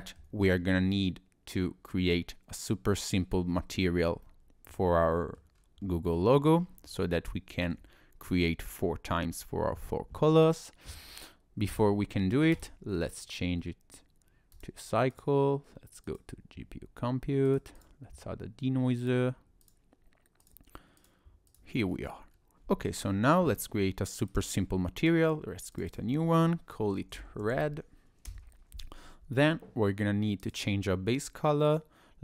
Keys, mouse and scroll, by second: 0.0 shift+middle click, 0.4-1.2 scroll up 2, 4.2 shift+middle click, 5.0 middle click, 5.6-6.1 scroll down 2, 6.1 middle click, 6.6-7.3 scroll up 4, 7.3 shift+middle click, 7.8 scroll down 1, 7.9-8.5 scroll up 1, 11.7 click, 12.5 click, 14.5 click, 17.5 click, 17.8 click, 19.0 click, 20.4 click, 21.0 click, 21.9-22.4 scroll down 4, 24.3 click, 25.0 click, 25.7 click, 25.9 click, 30.4 click.